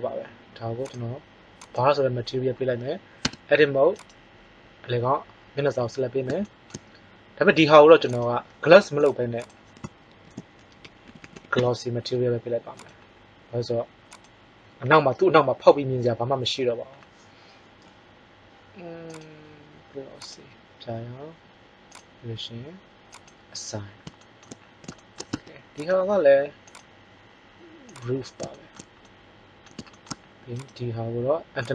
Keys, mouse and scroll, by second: 2.3-2.7 drag, 3.2 Tab, 3.9-6.0 drag, 6.0 middle click, 8.0-9.7 drag, 11.1 s, 19.0-23.0 drag, 23.2-24.8 drag, 25.3 Tab, 25.8-27.4 right drag, 26.6 click, 30.5-31.7 right drag.